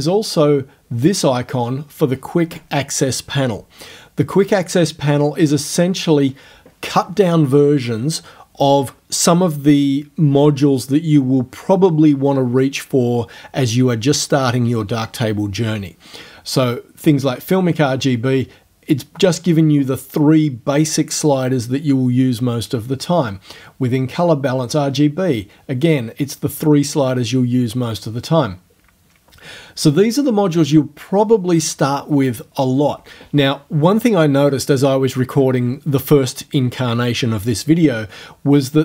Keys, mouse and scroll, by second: 4.4 click.